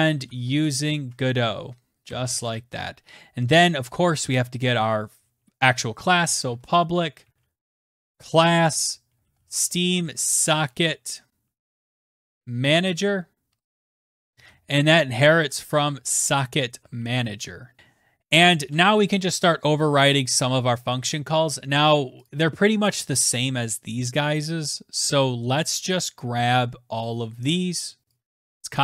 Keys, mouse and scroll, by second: 0.0-2.4 typing, 5.6-17.8 typing, 17.8 Tab, 18.5 Return, 22.1 click, 27.9 click, 28.1 ctrl+c.